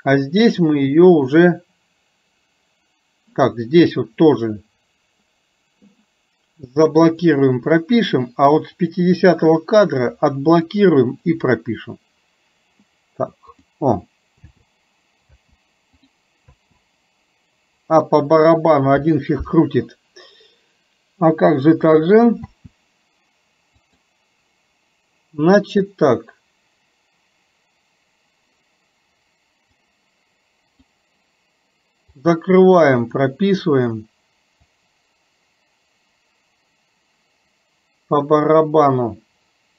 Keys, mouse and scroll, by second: 4.4 click, 8.8 click, 11.4 click, 13.6 click, 16.1 click, 23.9 click, 29.9-31.0 drag, 32.2 click, 33.2 click, 34.8-39.7 drag.